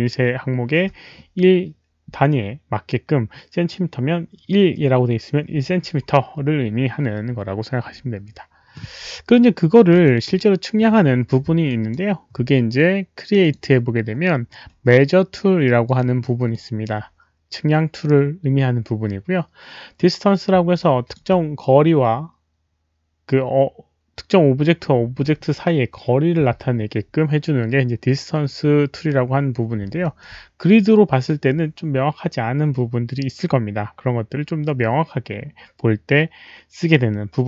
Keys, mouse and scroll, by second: 0.5 alt+right click, 0.5 w, 4.1 click, 4.2 click, 10.0 Delete, 11.6 alt+right drag, 13.4 click, 15.8 Delete, 15.8 click, 15.8 alt+right click, 16.5 Delete, 16.5-16.8 drag, 16.5 alt+right click, 16.8 Delete, 16.8 alt+right click, 18.7 Delete, 18.7 click, 18.7 alt+right click, 20.8-21.1 alt+drag, 21.1 alt+right click, 30.0 alt+middle drag, 30.2 alt+click, 34.7 alt+middle click, 36.3 alt+middle click.